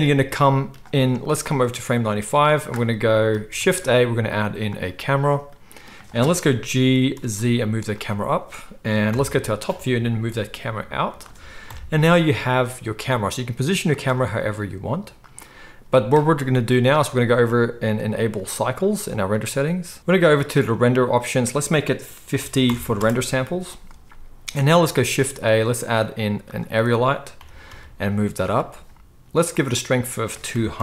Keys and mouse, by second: 1.5-8.0 drag, 3.6 shift+a, 6.8 g, 8.0-17.4 middle drag, 9.1 KP_7, 10.1 g, 11.6 KP_0, 12.8 g, 14.1 g, 17.4 click, 17.6-18.5 middle drag, 18.5-28.5 drag, 25.0 shift+a, 27.3 g, 28.5-30.0 middle drag, 30.0-30.8 drag.